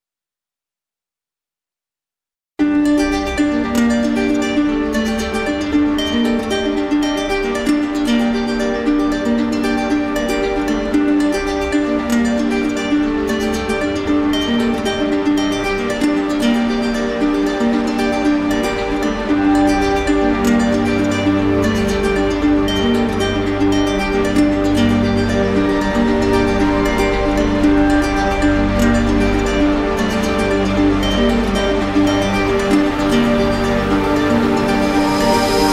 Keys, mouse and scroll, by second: 2.2 right click, 3.2 right click, 3.5 right click, 3.8 alt+middle click, 5.1 alt+right click, 6.0 alt+click, 6.0 alt+middle click, 6.3 alt+right click, 8.2 alt+right click, 10.8 right click, 11.7 alt+right click, 14.2-15.2 right drag, 16.8-22.2 right drag, 25.0 click, 30.4 alt+click, 31.4 click, 32.5 click, 33.9 alt+click.